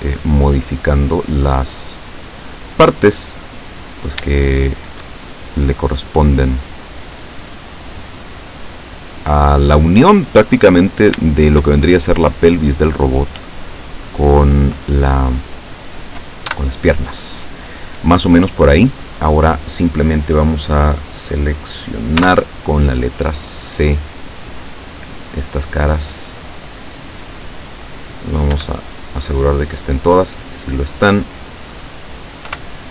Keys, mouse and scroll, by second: 0.6-2.5 drag, 3.3 right click, 3.7 middle click, 4.7 shift+right click, 5.3-6.4 shift+drag, 6.4 middle click, 7.4 middle click, 8.3-10.0 drag, 10.1-10.8 middle drag, 11.0 shift+right click, 11.5 shift+right click, 11.9 shift+middle click, 12.9-14.3 drag, 16.5 KP_7, 22.2 c, 23.1-28.0 drag, 28.6 Escape, 29.0-30.3 middle drag, 31.5-32.6 middle drag, 32.5 KP_7.